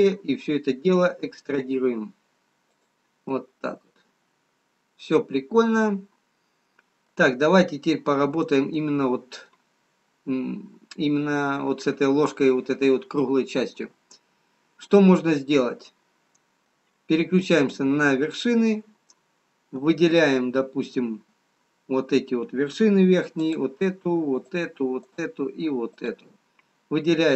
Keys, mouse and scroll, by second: 1.7 e, 3.4 middle click, 8.2-10.0 scroll up 2, 10.0 middle click, 11.2-11.5 scroll up 1, 13.6-15.3 scroll down 1, 15.3 middle click, 20.1 click, 23.3 click, 24.4 shift+click, 25.3 shift+click, 26.2 shift+click.